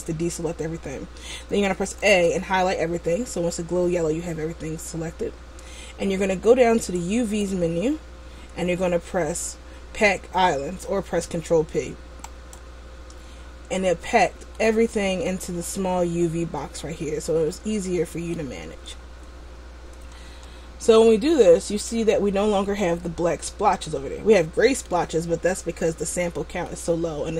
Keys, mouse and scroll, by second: 2.3 a, 7.1 click, 14.0-14.7 scroll up 3, 14.7 middle click, 15.7-17.2 scroll up 5, 17.4 middle click, 20.3 Tab, 21.2 middle click, 26.8 middle click.